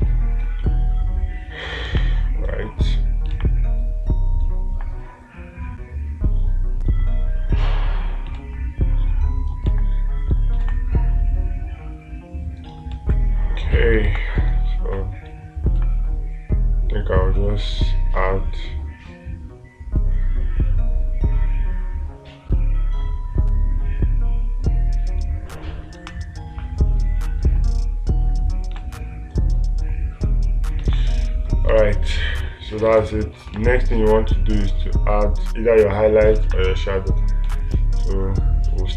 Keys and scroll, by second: 0.1 space, 2.3 space, 8.8 space, 11.1 space, 13.4 space, 14.5 space, 27.0 space, 29.2 space, 31.3 space, 34.0 space, 36.9 space.